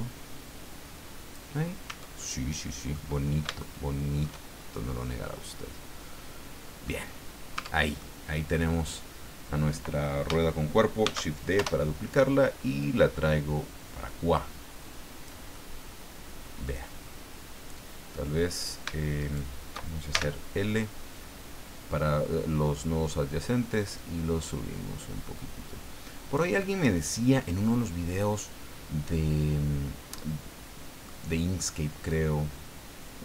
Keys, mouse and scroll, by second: 1.9 Tab, 2.2 middle click, 3.2 scroll up 1, 3.6 shift+middle click, 4.5-4.9 shift+scroll up 3, 5.0-7.0 middle drag, 7.0-7.3 scroll down 1, 7.6 Tab, 8.0 middle click, 11.0 shift+d, 11.6 shift+Return, 12.8-15.5 drag, 15.5-16.8 middle drag, 17.0-17.3 scroll down 2, 19.2 shift+right click, 20.1 shift+l, 23.9-26.5 drag, 26.6-31.2 middle drag, 32.1-33.2 drag.